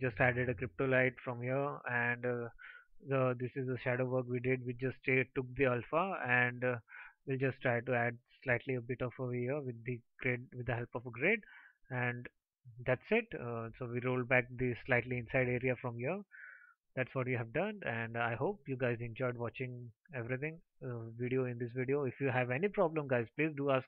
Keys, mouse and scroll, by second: 18.7 ctrl+s.